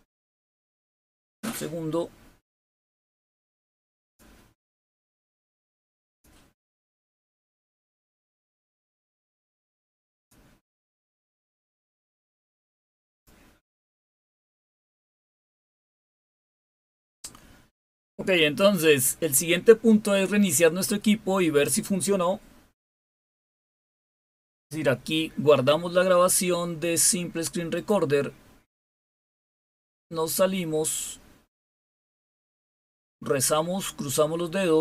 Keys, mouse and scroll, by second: 0.1 click, 2.4 click, 3.9 click, 5.9 click, 8.6 click, 10.0 click, 12.7 click.